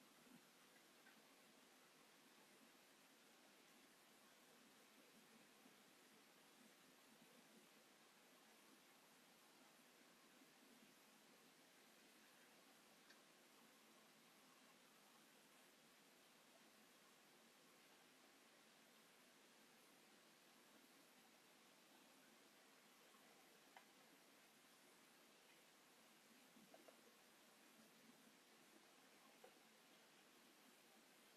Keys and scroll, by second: 0.3 space, 1.7 q, 3.4 9, 3.6 Return, 4.5 space, 5.6 alt+t, 7.4 m, 9.7 s, 11.7 space, 12.8 Escape, 17.9 space, 18.0 Escape, 19.2 Delete, 20.2 shift+x, 26.7 s, 28.1 space.